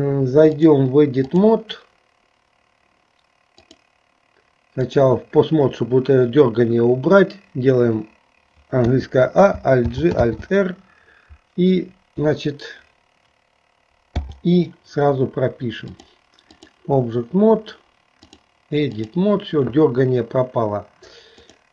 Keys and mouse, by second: 0.5-1.6 drag, 3.6-5.2 drag, 8.9 a, 10.0 alt+g, 10.4 alt+r, 15.9 click, 18.3-19.4 drag, 21.4 click.